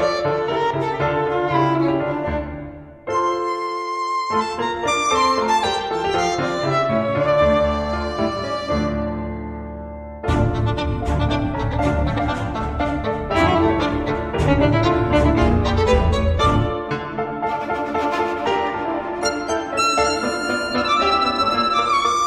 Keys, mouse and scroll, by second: 1.9 Caps_Lock, 2.2-3.5 typing, 5.9-8.2 typing, 9.1 click, 10.4 click, 15.7 click, 16.9 click, 18.4 0, 19.2 click, 20.4-22.2 typing.